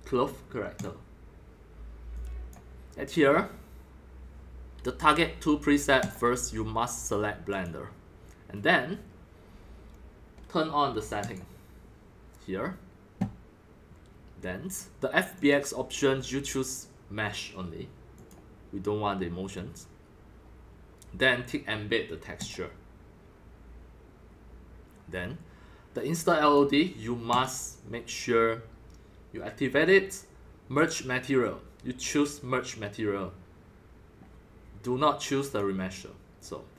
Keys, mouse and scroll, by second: 2.1 click, 2.6 click, 3.2-4.2 scroll up 5, 6.0 click, 6.0 scroll, 6.2-11.3 drag, 11.5-16.8 drag, 18.1 click, 18.3-20.2 drag, 22.3 click, 22.5 click, 26.4 click, 26.7 click, 27.3 click, 30.7 click, 32.3-36.3 drag.